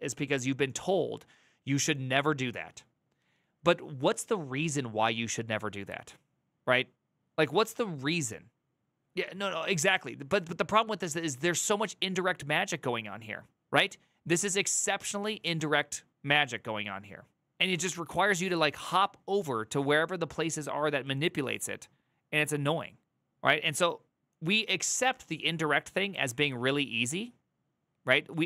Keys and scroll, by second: 18.0 alt++, 26.0 alt+[.